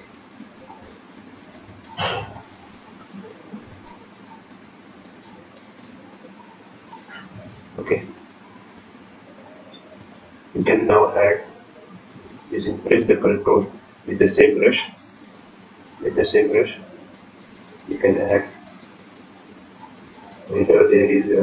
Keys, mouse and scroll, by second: 0.2 click, 0.5-1.4 scroll down 7, 1.2-2.2 scroll up 6, 3.7 click, 6.3 click, 10.2 click, 11.1 click, 11.1-11.4 scroll down 1, 11.4 click, 12.2 click, 15.6 click, 16.4 click, 17.2-17.5 scroll up 2, 17.5 click, 20.4 scroll down 2, 21.3 scroll down 5.